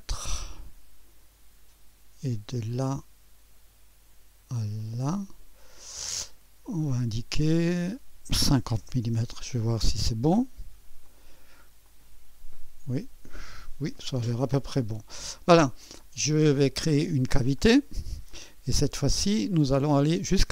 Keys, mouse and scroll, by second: 2.5-3.6 drag, 4.8 right click, 5.4 click, 6.8 right click, 7.5 click, 8.6 5, 8.8 KP_0, 9.0 Return, 11.0-16.0 drag, 16.0-17.6 scroll up 1, 18.2 click, 18.5-20.5 drag.